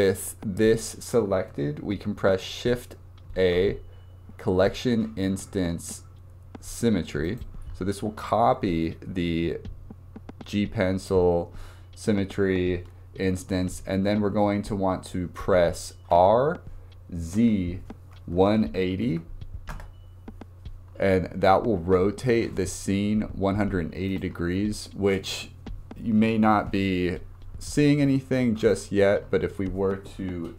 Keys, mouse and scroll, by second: 3.4 shift+a, 9.3 scroll down 2, 16.2 r, 24.1 click, 28.7-29.9 drag.